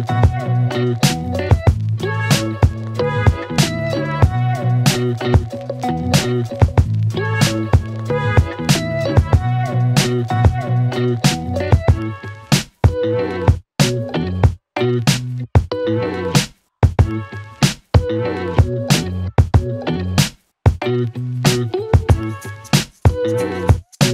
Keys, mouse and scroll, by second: 0.0-0.9 typing, 1.6-2.0 click, 7.3-8.5 typing, 9.0-9.5 click, 16.4 Return, 17.8-18.6 click, 18.6 space, 21.8-22.2 click.